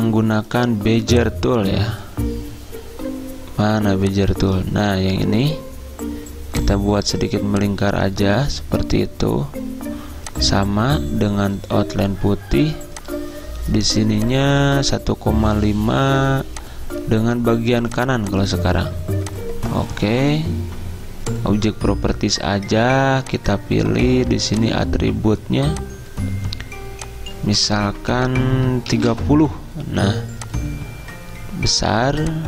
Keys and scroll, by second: 29.1 typing.